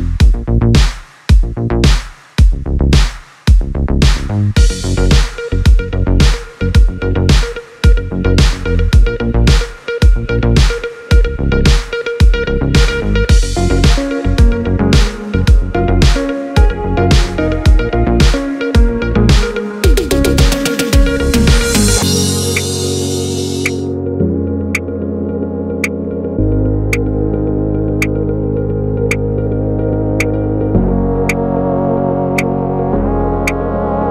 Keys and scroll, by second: 33.9 space.